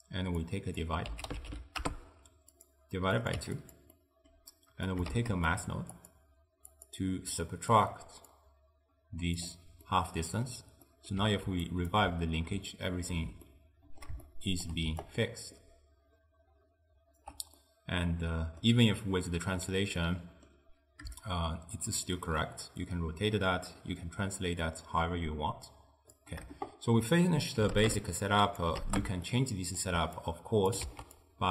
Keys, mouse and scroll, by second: 0.5 click, 3.2 click, 4.0-4.9 middle drag, 4.9 click, 5.2 shift+d, 6.0-7.5 drag, 8.4 drag, 9.9-11.7 middle drag, 11.7 ctrl+alt+right click, 12.8-14.9 shift+middle drag, 14.9 d, 15.1-17.3 right drag, 17.3 d, 17.7-22.2 middle drag, 22.2-29.4 shift+drag, 29.4-30.3 middle drag, 30.3 click, 30.9 ctrl+x, 31.3 click.